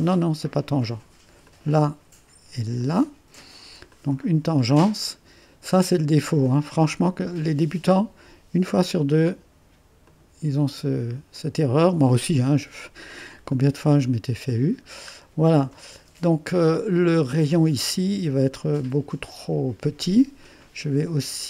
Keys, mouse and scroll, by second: 1.5 click, 2.8 click, 3.9 click, 5.8-6.3 scroll up 1, 8.7 click, 10.1 click, 10.4 click, 11.4 click, 12.7 middle click, 12.7 scroll down 1, 12.9 middle click, 13.6 middle click, 15.8 click, 16.2 right click, 20.4-21.4 right drag.